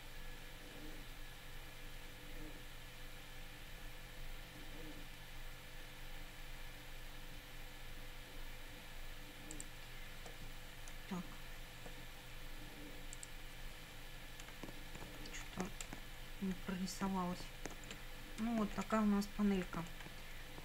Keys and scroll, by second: 14.5 Up, 15.1 Left, 15.5 Up, 15.9 Right, 16.3 Up, 18.0 Left, 18.5 Up, 18.9 Right, 19.5 Up.